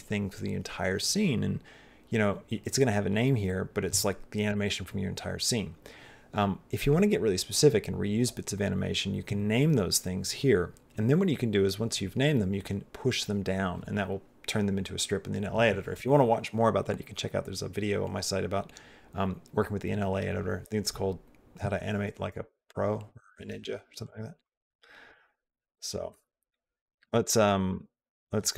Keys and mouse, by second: 23.9 click, 24.3 click, 27.6 click.